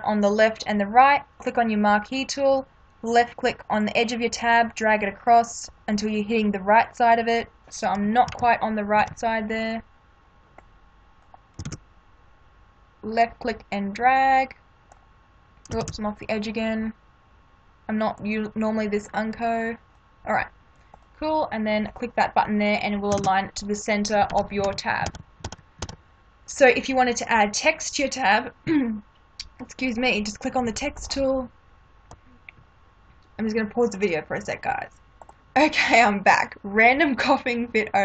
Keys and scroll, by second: 8.3 ctrl+=, 11.6 ctrl+d, 15.8 ctrl+d, 23.1 ctrl+d, 24.3 ctrl+-, 36.7 space.